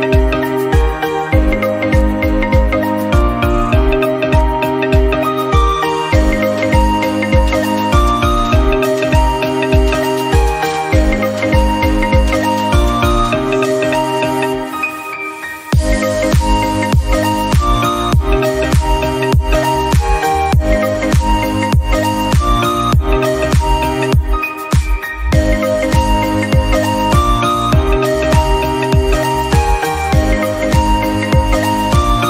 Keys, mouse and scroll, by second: 0.3 middle click, 0.6 click, 1.6 middle click, 2.0 click, 2.3 click, 2.6 middle click, 3.2 click, 3.6 scroll down 2, 3.8 Tab, 4.2 click, 4.3 scroll down 1, 4.4 middle click, 5.4 shift+middle click, 6.2-6.9 scroll up 1, 6.9 click, 7.3 Tab, 9.3 3, 9.7 click, 10.7-13.0 shift+middle drag, 13.7-15.6 middle drag, 15.6 click, 16.7 middle click, 17.4 shift+click, 18.1 scroll down 1, 18.2-19.4 middle drag, 19.4 shift+click, 20.2 i, 21.7 middle click, 22.2-22.5 scroll up 1, 22.5 click, 22.9 1, 23.1 scroll up 1, 23.3 shift+middle click, 23.7-26.3 drag, 26.3 scroll down 2, 26.4 middle click, 27.1-27.5 scroll up 1, 27.5 click, 27.7 shift+middle click, 28.1 click, 28.6 shift+middle click, 29.2 click, 29.7 scroll down 1, 29.9-30.2 scroll up 1, 30.2 click, 31.1 shift+middle click, 31.6 3, 31.7 scroll up 1, 31.9 middle click.